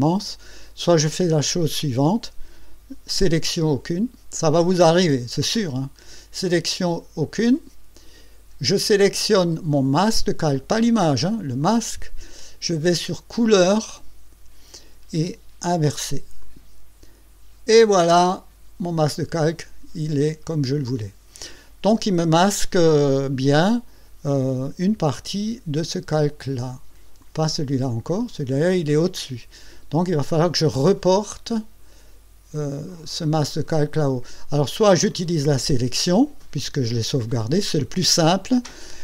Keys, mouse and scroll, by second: 5.8 click, 7.2 click, 9.8 click, 10.8 click, 11.6 click, 13.5 click, 16.4 click, 27.2 click, 27.9 click.